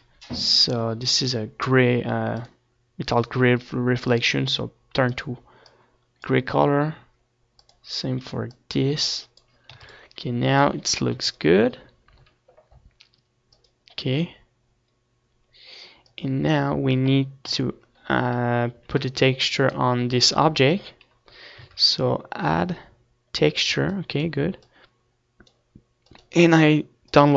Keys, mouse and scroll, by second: 4.9-7.4 drag, 9.1-10.7 drag, 11.1 ctrl+s, 11.8-14.9 middle drag, 12.5 ctrl+s, 14.9-16.7 drag, 18.1 middle click, 18.8 KP_7, 20.1 z, 21.1-22.9 middle drag, 22.9-25.0 drag, 25.0 shift+a.